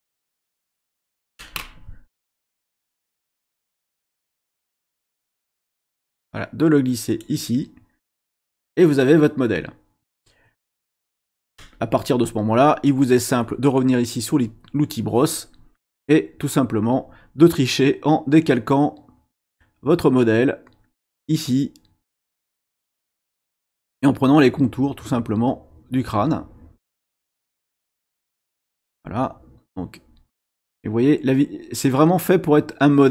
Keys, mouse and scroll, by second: 0.1 middle click, 2.3-3.8 drag, 4.6-7.4 drag, 14.4 click, 17.9-22.9 drag, 24.3-28.2 drag, 29.7-33.1 drag.